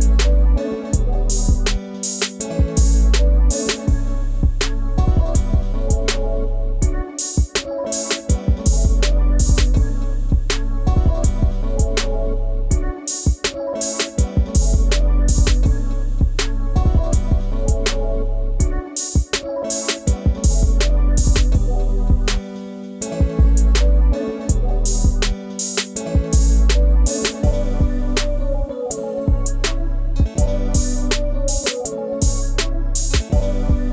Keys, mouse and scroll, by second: 0.7 ctrl+z, 4.3 double click, 9.1 alt+click, 13.6 scroll up 1, 17.4 ctrl+2, 17.9 scroll up 1, 27.5 scroll down 1, 28.2 scroll up 1, 28.5 ctrl+space, 28.6 ctrl+click, 28.8 ctrl+space.